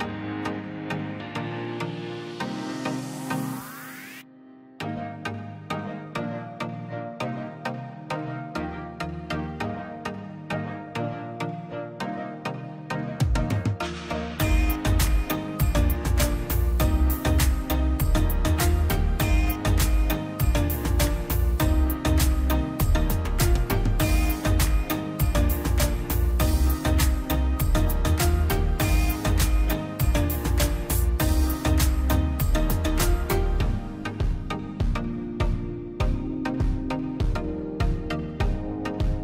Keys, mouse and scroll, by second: 0.1 middle click, 0.6 scroll up 1, 0.9 middle click, 1.2-1.6 scroll down 1, 1.9 l, 2.2 middle click, 2.5 scroll up 1, 2.7 middle click, 3.0-3.3 scroll up 1, 3.3 click, 3.7 Escape, 4.1 click, 4.8-5.1 scroll down 1, 5.1 space, 5.9 l, 6.4 click, 7.1 space, 8.9 click, 9.8 r, 10.3 click, 11.1 space, 11.3 click, 11.8 right click, 12.6 click, 14.4 Delete, 15.0 click, 15.1 Delete, 15.5 click, 16.8 p, 17.0-18.8 drag, 18.8 scroll up 1, 19.1 click, 19.5-20.0 scroll down 1, 20.3 ctrl+z, 20.9-21.3 scroll down 1, 21.8 middle click, 22.4 scroll, 23.8 scroll down 1, 24.6 scroll up 1, 25.4 click, 25.7 scroll down 1, 26.8 middle click, 27.5 click, 28.5 middle click, 28.9 scroll up 1, 29.1-30.4 drag, 30.4 middle click, 31.0 click, 32.0 scroll down 1, 32.2 middle click, 32.5-33.1 scroll up 1, 33.1 middle click, 33.7 click, 34.0 scroll down 1, 34.8 l, 35.0-35.6 scroll up 1, 35.6 click, 36.5-37.4 scroll up 1, 38.0 click, 39.1 space.